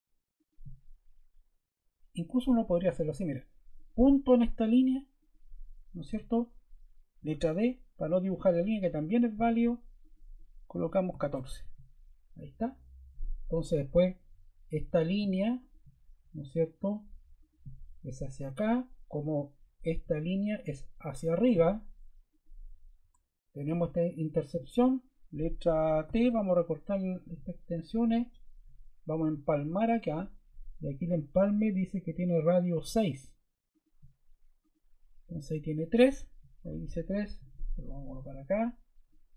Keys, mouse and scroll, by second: 2.4 Escape, 5.9 Escape, 7.1 d, 10.5-11.5 typing, 19.2 ⟲, 20.0 i, 26.0 t.